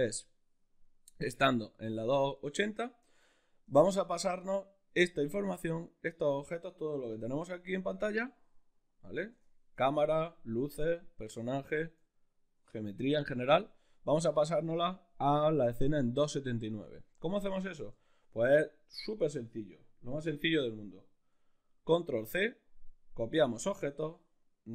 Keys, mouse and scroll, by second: 3.8-24.7 shift+middle drag, 7.5 a, 22.2 ctrl+c.